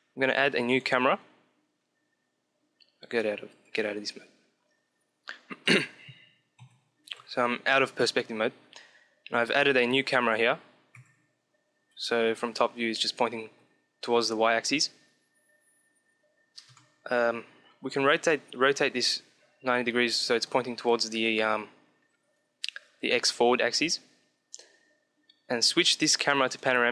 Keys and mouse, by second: 3.7 click, 4.7-6.9 middle drag, 5.5 Home, 6.5 KP_1, 6.9 KP_5, 8.7-9.8 middle drag, 9.2 KP_3, 10.8 KP_1, 11.7 KP_7, 13.3 KP_1, 16.5 KP_7, 17.6 r, 24.3-26.4 drag.